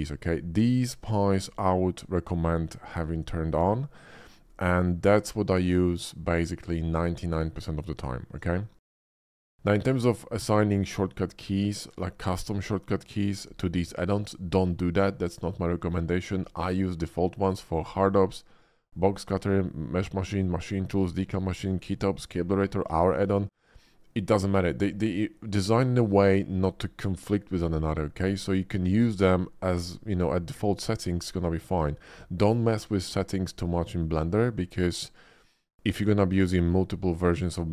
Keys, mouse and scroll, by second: 9.1 click.